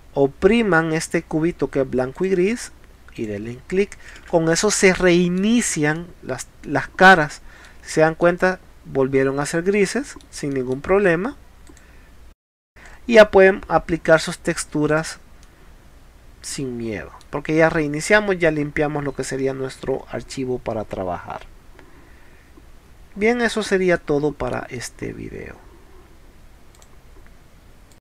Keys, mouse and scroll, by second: 2.2 click, 3.2 click, 4.3 space, 4.6 click, 5.0 middle click, 6.0-6.3 middle drag, 6.7-7.7 middle drag, 7.9 middle click, 8.7-9.1 scroll down 1, 9.1 scroll up 1, 9.5 middle click, 10.6 middle click, 11.0 middle click, 11.7 click, 12.9 middle click, 14.9 click, 15.4-17.1 middle drag, 18.5 scroll down 4, 19.0 scroll up 2, 19.9 middle click, 23.1-23.9 scroll down 2, 24.0 middle click, 26.8 click, 27.9 click.